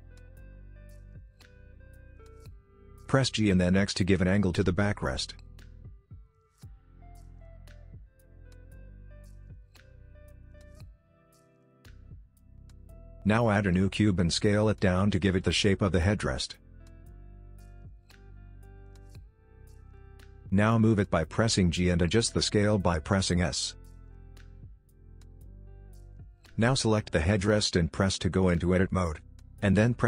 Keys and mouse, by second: 1.1 g, 5.6 middle click, 6.3 middle click, 8.5 click, 9.4-10.6 middle drag, 11.0 middle click, 12.5 Tab, 12.7 shift+a, 13.6 g, 14.1 middle click, 14.6 s, 15.6 middle click, 15.8 KP_7, 16.1 shift+middle click, 16.3 shift+middle click, 16.5 s, 17.2 middle click, 17.4 middle click, 17.8 s, 19.4 KP_1, 19.6 KP_3, 19.9 g, 20.7 g, 22.0 s, 22.8 middle click, 23.0 shift+middle click, 23.4 KP_3, 23.7 shift+middle click, 24.2 KP_7, 24.7 g, 25.6 middle click, 27.3 Tab, 28.6 ctrl+r.